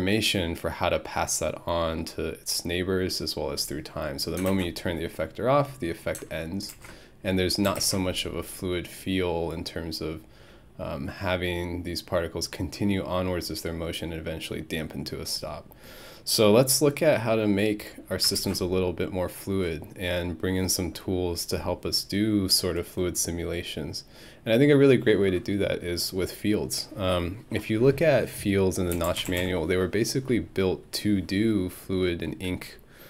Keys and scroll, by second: 28.7-29.9 typing.